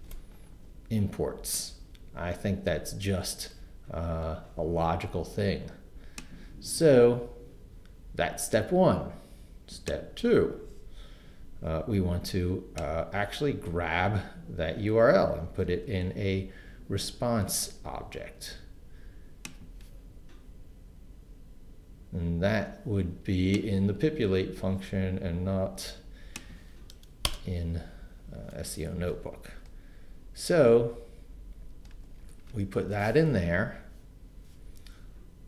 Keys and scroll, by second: 15.6 super+c, 27.2 Return, 31.9 super+v.